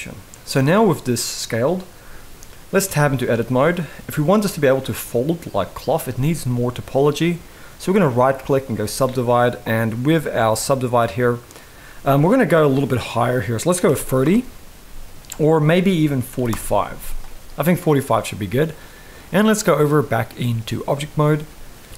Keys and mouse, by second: 2.6 Tab, 3.0 middle click, 4.5 middle click, 7.7-8.5 right drag, 10.2 click, 11.2-13.9 drag, 15.0-16.2 drag, 17.2 middle click, 19.4-20.6 drag.